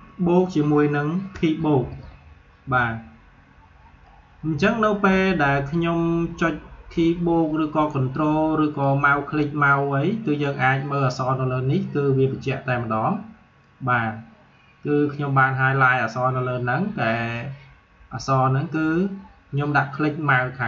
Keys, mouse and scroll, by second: 0.2 ctrl+Num_Lock, 0.2-1.3 drag, 1.3 ctrl+=, 8.8-12.6 drag, 13.6-20.6 drag.